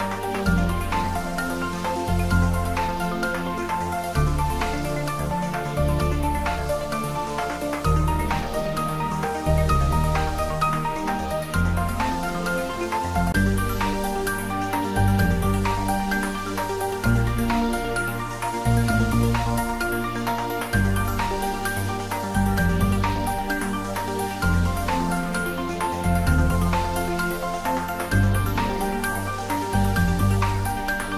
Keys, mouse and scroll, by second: 1.5-2.2 scroll down 1, 2.8-5.0 scroll down 1, 5.1 click, 9.2 h, 11.2-13.2 scroll up 1, 13.2 scroll up 1, 19.4-20.7 middle drag, 20.7 click, 22.1 Tab, 22.9 click, 24.5 alt+shift+click, 26.4-30.1 middle drag, 30.1-31.1 shift+middle drag.